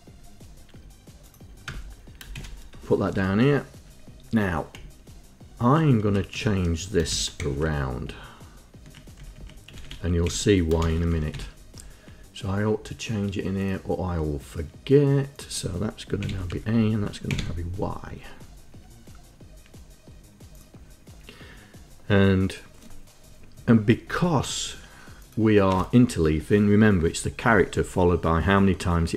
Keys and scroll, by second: 1.8 Return, 2.5 shift+Insert, 2.5 shift+Delete, 3.2 Up, 4.9 Right, 6.2 Right, 6.5 Delete, 7.3 shift+a, 7.6 c, 8.2 Right, 9.3 Right, 9.8 Delete, 10.4 Delete, 11.0 shift+y, 11.4 Down, 11.5 Up, 16.0 Left, 16.3 Delete, 16.4 a, 16.6 Down, 17.1 Left, 17.4 Delete, 25.8 Return.